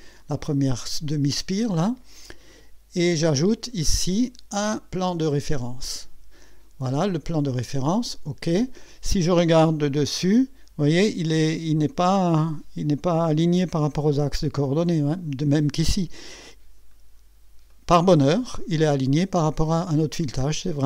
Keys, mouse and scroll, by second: 5.0 click, 8.1 click, 9.8 KP_2, 15.9 scroll up 2, 16.3-17.0 right drag, 17.1 scroll up 2, 17.7-18.2 right drag, 20.4-20.8 scroll down 3.